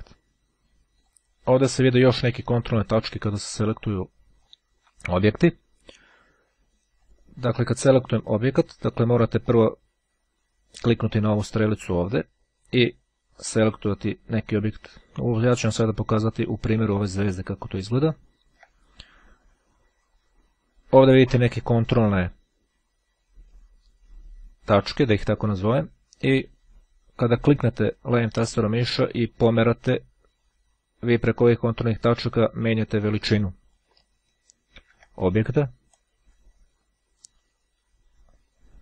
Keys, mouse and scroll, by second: 0.9 click, 3.0 click, 4.4 click, 7.0 click, 9.5 click, 13.5 click, 16.7-17.3 shift+scroll down 2, 18.2-19.4 ctrl+scroll up 2, 27.2-34.2 drag, 35.0 ctrl+z, 36.3-38.8 drag.